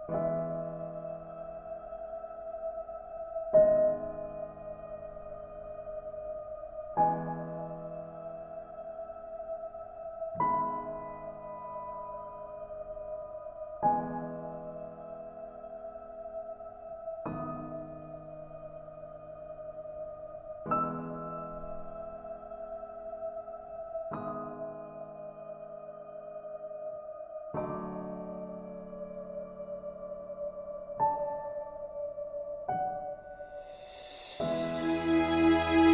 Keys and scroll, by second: 33.9 ctrl+alt+shift+s.